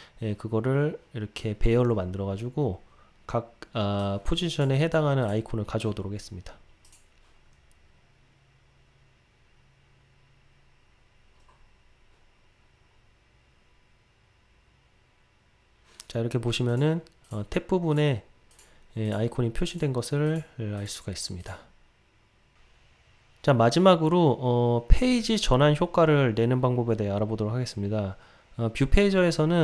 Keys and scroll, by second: 7.0 ctrl+r.